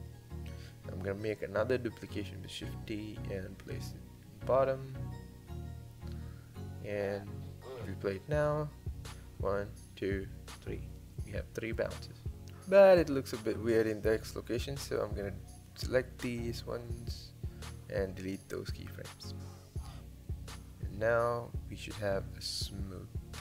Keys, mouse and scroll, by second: 1.8 shift+d, 7.7 click, 8.0 space, 11.1 space, 12.4 click, 16.0 shift+click, 20.1 x, 23.2 click.